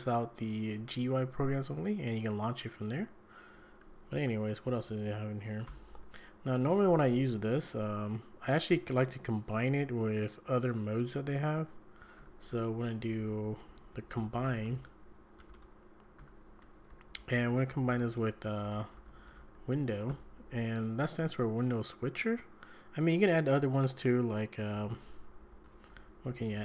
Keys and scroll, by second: 3.5 `, 4.7 ctrl+c, 5.7 ctrl+l, 6.9 Up, 11.8 Escape, 12.0 Escape, 12.2-20.1 typing, 16.6 Escape, 20.6 Escape, 24.7-26.6 typing.